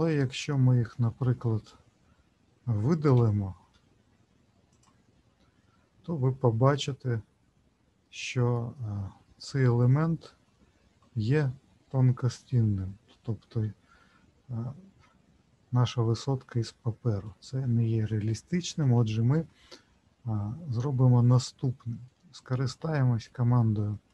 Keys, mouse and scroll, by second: 0.4 middle click, 3.1 Delete, 6.2 scroll up 2, 6.8-7.7 scroll up 3, 8.0 shift+middle click, 8.7 middle click, 9.8-10.9 scroll up 6, 13.1-16.0 scroll down 12, 16.0 middle click, 18.9 ctrl+z, 21.0 middle click, 22.8 middle click, 23.6 shift+middle click, 23.8 shift+middle click.